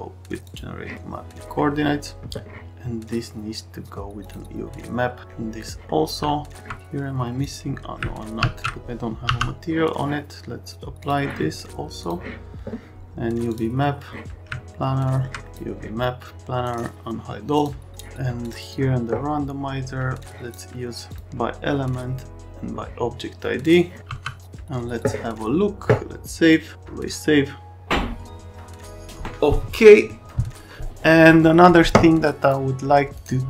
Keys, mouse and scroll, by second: 8.4 alt+x, 9.2 m, 11.0 F10, 12.0 F10, 20.3 click, 21.1 click, 23.6 click, 32.4 click.